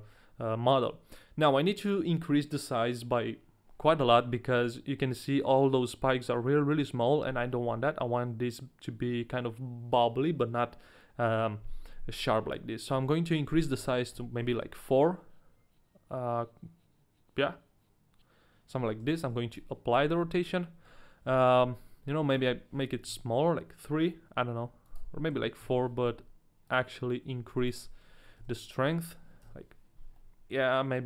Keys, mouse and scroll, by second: 4.8 middle click, 5.1-6.7 scroll up 1, 6.7 KP_1, 7.4-7.9 scroll down 2, 12.8 click, 19.2 ctrl+a, 19.4 ctrl+a, 20.3 middle click, 21.3 KP_1, 22.3 click, 24.9 click, 26.7 click, 27.7 click, 29.0 click, 30.2 middle click.